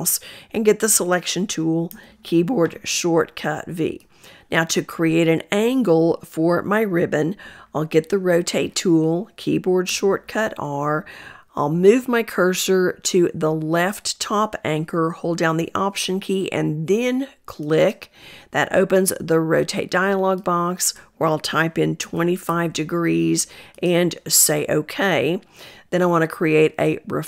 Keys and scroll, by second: 0.4 v, 7.6 r.